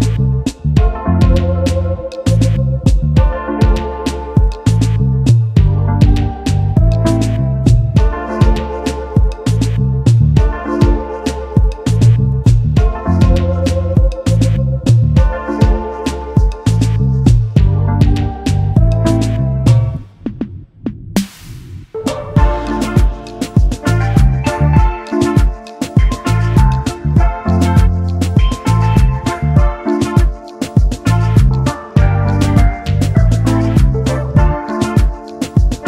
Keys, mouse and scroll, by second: 0.0 double click, 1.4 shift+click, 5.7 alt+scroll down 1, 7.0-7.7 alt+scroll down 1, 8.9-9.2 alt+scroll up 1, 9.6 double click, 9.9 space, 10.3 alt+scroll up 1, 11.5 scroll down 1, 15.1 ctrl+8, 16.2 double click, 24.8-25.7 alt+scroll down 1, 25.8 alt+scroll up 1, 26.5 alt+scroll up 1, 28.8 alt+scroll up 1, 29.7 space.